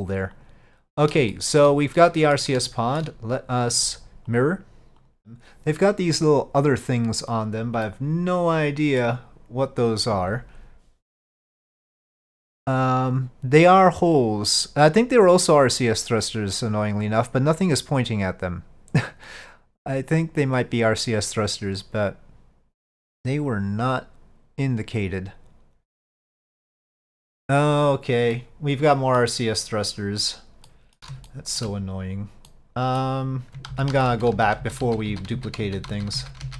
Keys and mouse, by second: 0.4 click, 1.4-1.7 shift+middle drag, 2.1-2.4 middle drag, 2.8-3.1 shift+middle drag, 4.4 click, 8.0-9.1 middle drag, 28.4-29.3 middle drag, 30.7-31.1 middle drag, 31.3-31.7 shift+middle drag, 32.6 middle click, 33.8-36.5 ctrl+z.